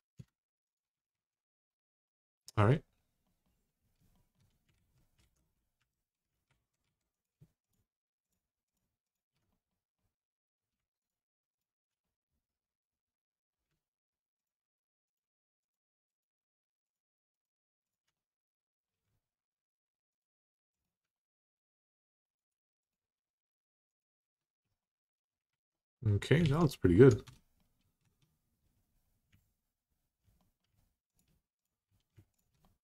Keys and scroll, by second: 0.9 alt+z, 1.1 typing, 4.5 alt+z, 5.0 alt+z, 5.6 2, 6.3 alt+z, 24.0 Tab, 25.3 alt+z, 26.2 alt+z, 27.0 Tab, 27.8 Tab.